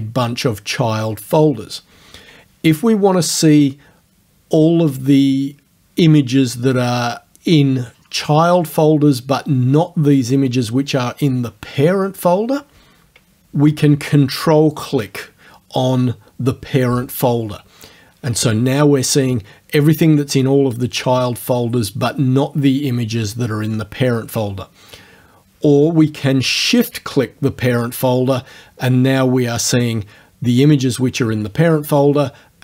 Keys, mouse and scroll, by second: 13.1 alt+Tab, 14.8 ctrl+click, 26.8 shift+click.